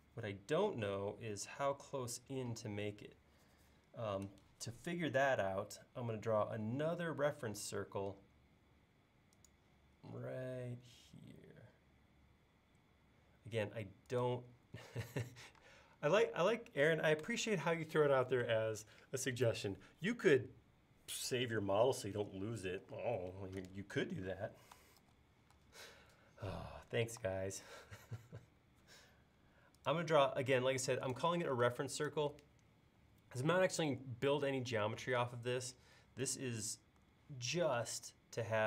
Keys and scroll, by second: 6.9 i, 15.6 space, 25.0 super+s, 27.2 c, 31.7 space, 35.1 m.